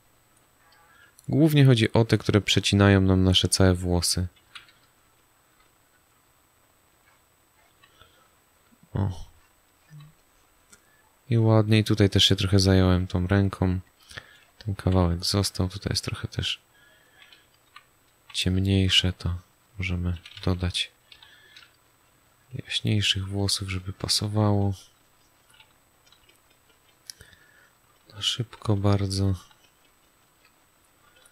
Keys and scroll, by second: 0.8 space, 4.4 z, 4.9 space, 7.7 space, 9.9 space, 12.8 space, 14.7 z, 15.4 space, 17.6 g, 18.2 s, 21.1 6.